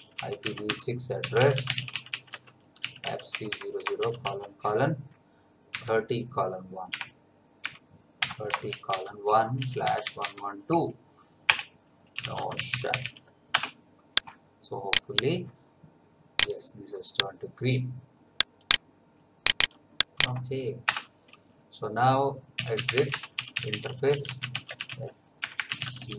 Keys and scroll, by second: 0.0-4.0 typing, 0.6 Tab, 5.7 3, 6.9-10.6 typing, 11.5 Return, 11.9-13.5 typing, 13.5 Return, 20.9 Return, 22.3-26.1 typing.